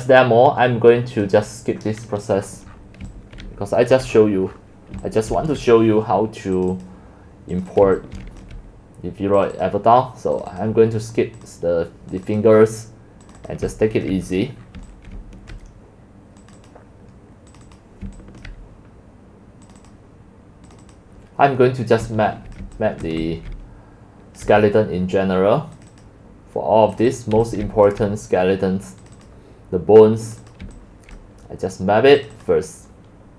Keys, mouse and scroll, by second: 2.3-3.1 scroll down 14, 3.2-5.0 typing, 4.0 click, 4.4 scroll, 4.6 scroll down 8, 4.7-5.0 scroll up 14, 5.6-7.9 drag, 8.2 x, 8.5-13.8 drag, 14.1 click, 14.4-15.0 scroll down 8, 14.7-15.7 typing, 14.8 middle click, 15.6-16.8 drag, 17.6 click, 17.8 click, 18.1 c, 18.5-19.5 drag, 19.8-21.1 drag, 22.6 click, 23.1 click, 23.3 x, 23.6 c, 24.2-24.5 c, 24.6 c, 25.9-26.4 drag, 27.1 click, 27.2 click, 27.4 x, 27.7 c, 27.9 click, 29.3 click, 30.3 click, 31.2-31.7 drag, 32.5 click.